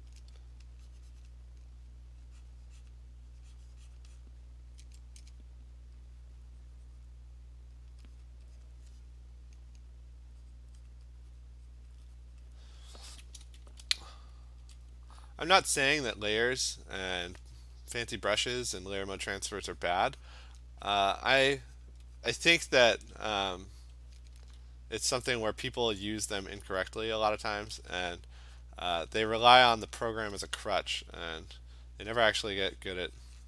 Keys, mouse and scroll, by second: 1.3 click, 2.9 click, 4.0 click, 4.2 click, 6.1 click, 7.1 click, 7.9 click, 8.3 click, 8.7 click, 10.6 click, 10.9 click, 11.4 click, 11.8 click, 12.4 click, 13.6 ], 13.8 ], 14.1 [, 14.4 [, 15.2 click, 18.0 click, 19.9 click, 20.3 click, 21.1 click, 21.4 click, 21.5 click, 21.9 click, 22.5 click, 24.4 [, 25.1 [, 26.8 click, 27.7 ], 27.9 ], 28.6 click, 29.1 click, 29.5 click, 29.8 click, 30.2 click, 30.4 ], 32.3 click, 32.5 click, 33.0 click.